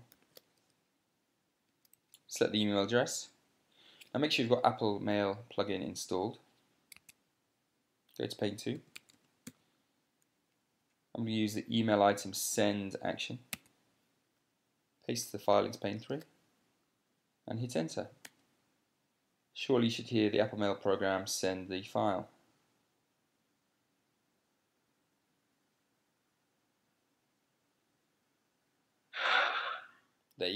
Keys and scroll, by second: 0.7 super+c, 2.4 Up, 2.5 Up, 7.7 Tab, 8.9-10.6 typing, 11.5 Down, 14.2 Tab, 16.6 super+v, 18.7 Return.